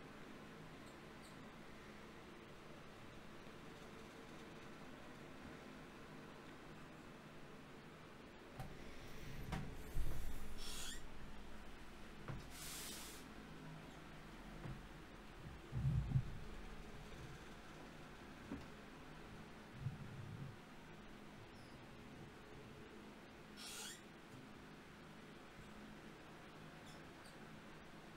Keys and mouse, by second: 9.8 n, 11.6 n, 15.8 Tab, 17.6-20.1 drag, 19.8 Tab, 21.2 ctrl+Tab, 23.7 middle click, 24.0 middle click, 24.9 middle click.